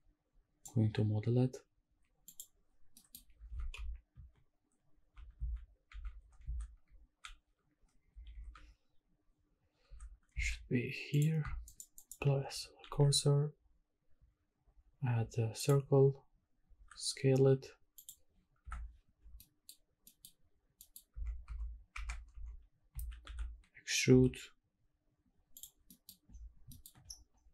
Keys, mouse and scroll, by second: 2.4 click, 2.9 middle click, 3.5 shift+`, 11.7 shift+right click, 12.9 shift+a, 16.7 s, 18.0 click, 18.6 KP_Decimal, 19.2 scroll down 2, 19.4 middle drag, 20.0-20.8 scroll up 2, 20.1 middle click, 20.8 middle click, 21.1 Tab, 21.5 Tab, 22.0 Tab, 22.3 1, 22.9 a, 23.2 e, 24.2 z, 25.6 click, 25.8-27.5 scroll down 6, 25.9 middle click, 26.7 shift+middle click.